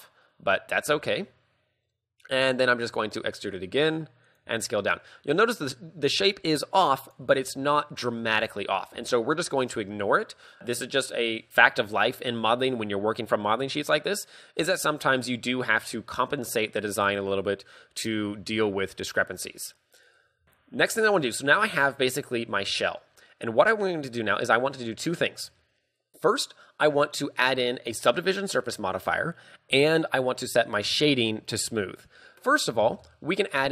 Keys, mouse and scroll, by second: 0.2-0.6 scroll down 2, 0.6 scroll up 2, 0.9 s, 2.4 click, 3.0 e, 4.4 click, 4.6 s, 7.2 click, 7.3 z, 8.2-8.6 scroll down 2, 8.7 shift+middle click, 9.0 z, 10.2-11.2 scroll up 2, 17.1 z, 18.6 z, 20.4 z, 20.4 a, 21.0 Tab, 21.1-21.4 scroll down 3, 21.4 middle click, 23.2-23.5 scroll up 3, 23.5 KP_2, 25.5 KP_3, 33.0 shift+space.